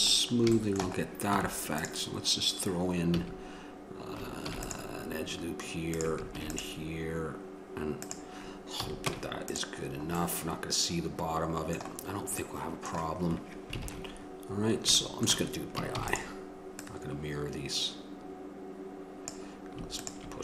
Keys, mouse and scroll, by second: 1.5 middle click, 1.5 Tab, 3.3-4.7 middle drag, 3.3 a, 4.7 ctrl+r, 9.0 a, 9.3 Tab, 16.2 shift+d.